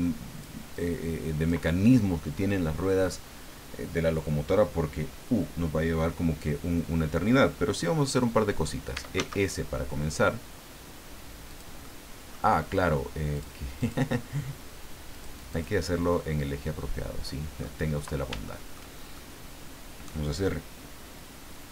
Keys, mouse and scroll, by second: 0.7 click, 8.7-9.7 typing, 11.5 click, 11.8 middle click, 13.3 click, 13.8 click, 15.1 click, 15.5 click, 16.1-17.8 middle drag, 17.9 scroll up 2, 18.5 shift+middle click, 19.2-20.2 shift+middle drag.